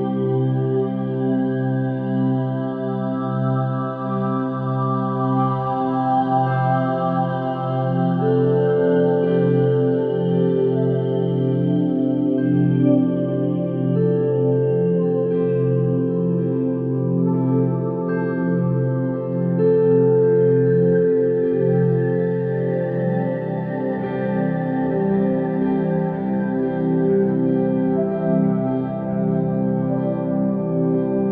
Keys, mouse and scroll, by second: 4.7 click, 5.4-10.5 drag, 10.5 0, 11.0 0, 12.2-13.4 scroll down 3, 13.4-14.0 drag, 14.0-16.0 scroll down 3, 16.0 click, 16.3-17.3 scroll down 3, 17.3-17.6 drag, 17.6-19.4 scroll down 6, 19.4-22.4 drag, 22.9-23.9 scroll up 4, 23.9-25.0 drag, 25.0 0, 25.2 0, 26.6 0, 28.6 click, 29.5-31.3 drag.